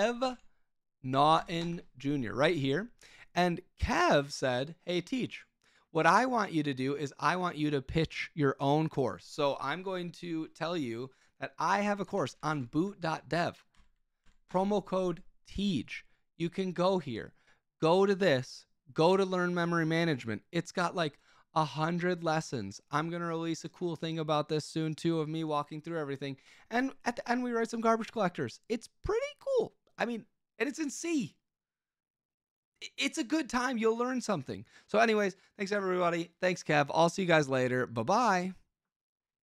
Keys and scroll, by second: 0.0-1.6 typing, 11.9-13.0 typing, 13.7 Down, 14.2 Down, 14.4 Return.